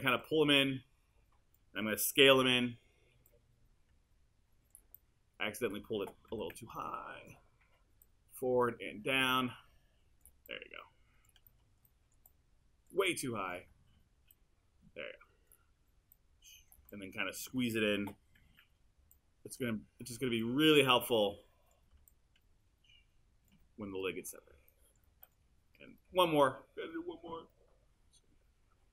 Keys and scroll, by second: 2.4 r, 6.3 w, 18.4 r.